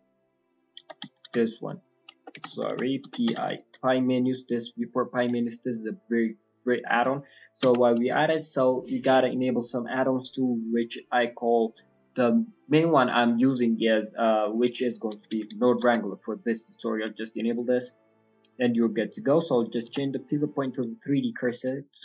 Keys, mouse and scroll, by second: 18.8 scroll up 2.